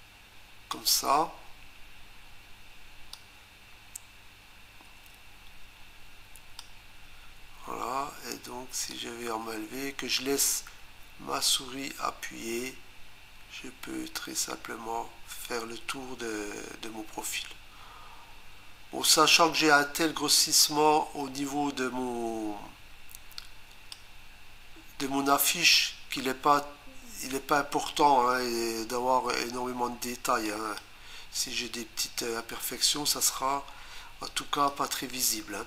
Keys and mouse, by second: 3.1 click, 8.9 click, 30.5 click, 34.7 click.